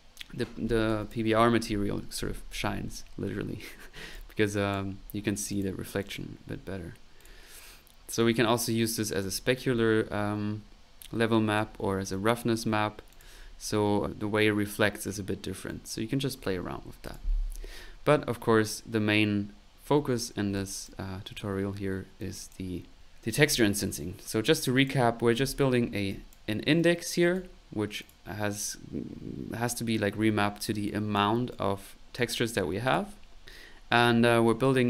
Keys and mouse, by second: 0.9 click, 1.5 p, 4.0 middle click, 4.1 click, 5.1 middle click, 5.5 click, 6.0 click, 7.2 click, 8.3 click, 11.5-12.9 ctrl+drag, 13.1 click, 15.7 click, 20.1 middle click, 20.5 click, 21.7 middle click, 22.2 click, 23.0 click, 24.4 click, 25.3 middle click, 26.0 middle click, 26.1 click, 26.8 right click, 28.0 click, 28.2 typing, 30.4 middle click, 30.8 click, 31.5 right click, 32.8 click, 34.4 right click.